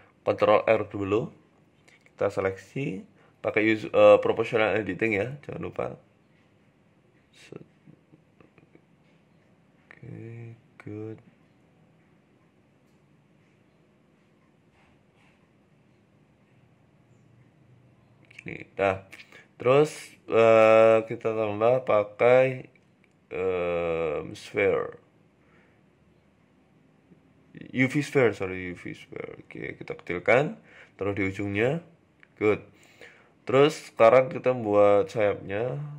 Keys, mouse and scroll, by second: 0.0 ctrl+r, 1.6 click, 2.4 o, 3.2 g, 5.4 r, 7.0 g, 8.6 t, 9.0 t, 9.2 r, 12.6 g, 15.6 r, 17.8 Tab, 18.0-18.6 scroll down 2, 18.3-18.6 scroll up 2, 18.6 shift+a, 19.2 middle click, 19.9-20.3 scroll down 2, 20.5 middle click, 21.2 KP_1, 21.4 Tab, 21.7-22.1 scroll up 3, 22.1 shift+a, 23.2 s, 24.5 g, 25.6 ctrl+z, 26.3 click, 26.8 click, 27.0 s, 27.7 g, 28.6 s, 30.3 g, 31.5 Tab, 31.6 scroll down 3, 32.1 scroll down 5, 33.3 scroll up 2, 33.3 shift+a, 34.7-35.3 scroll down 4, 35.2 s.